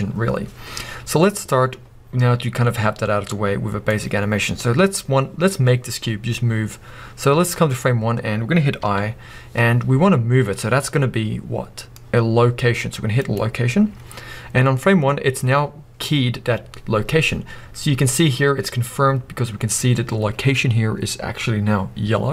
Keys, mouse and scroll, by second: 0.8 scroll down 1, 8.2-8.9 scroll up 1.